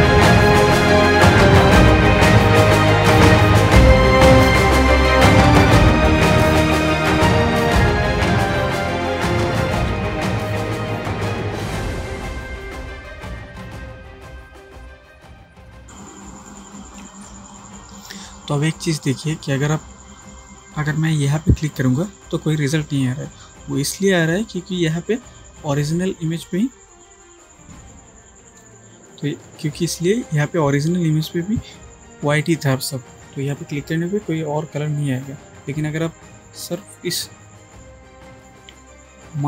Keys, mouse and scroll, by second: 0.3 space, 0.5 click, 0.6 space, 0.7-1.2 click, 3.4 space, 3.5 click, 3.8-4.3 drag, 6.0 space, 6.1 click, 6.2 space, 6.4-6.7 click, 7.1 super+space, 7.2 super+click, 7.3 super+space, 7.7 super+click, 7.8 super+space, 8.3 ctrl+click, 8.9-9.6 click, 9.7 alt+right click, 10.0 click, 10.5 space, 10.6 click, 11.0-11.5 click, 11.5 space, 11.7-12.4 drag, 13.0-13.3 click, 13.5 space, 13.6 click, 13.7 space, 13.9-14.8 drag, 15.6 space, 15.6 click, 15.7-16.5 space, 15.9-17.2 drag, 17.3 space, 17.5 click, 17.8 space, 21.7 click, 27.8 click, 33.5 click.